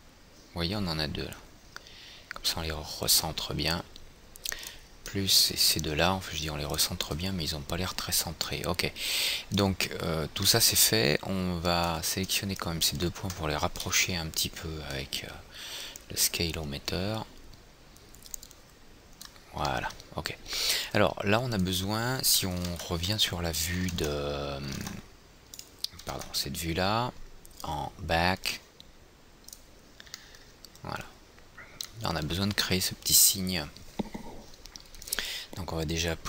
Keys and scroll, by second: 14.3 r, 23.1 alt+w.